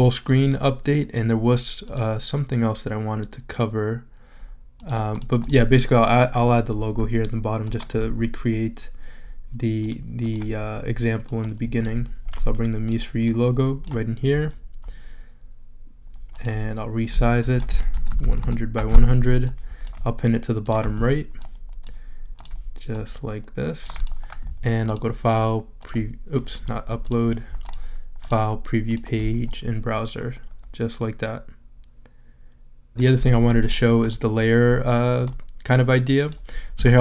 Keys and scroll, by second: 18.1 0, 18.4 Return.